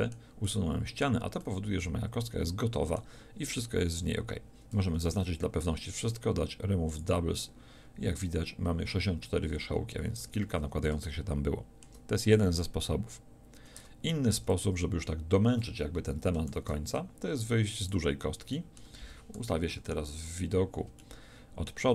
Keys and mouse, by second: 4.7 a, 6.0 w, 10.2 a, 11.1-13.4 drag, 14.4 Tab, 14.4 x, 16.5 shift+a, 18.6-19.7 drag, 19.7 KP_1.